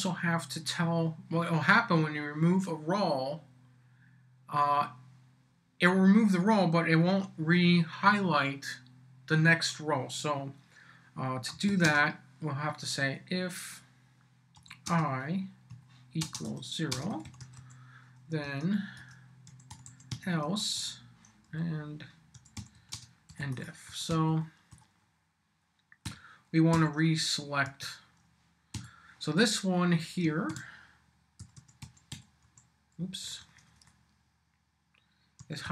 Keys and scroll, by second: 11.3-12.2 typing, 14.5-18.1 typing, 18.4 Return, 19.2-20.6 typing, 21.4 Down, 22.1-23.9 typing, 26.0 l, 26.7 b, 27.6 Tab, 28.7 •, 30.5-33.0 typing, 35.1-35.7 typing.